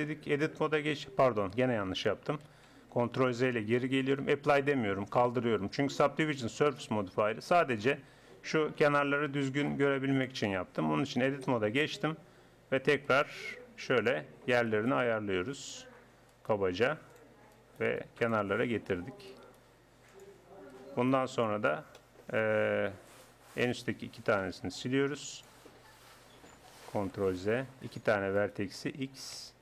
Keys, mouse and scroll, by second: 0.3 Tab, 1.2 Tab, 2.4 ctrl+z, 3.2 ctrl+z, 7.0-8.8 middle drag, 10.2 click, 10.8 Tab, 13.3 right click, 14.3-16.4 right drag, 19.6 right click, 20.9 right click, 22.0-23.1 drag, 23.1-25.7 right drag, 24.8 x, 27.2 ctrl+z, 27.8-29.6 drag, 29.4 x.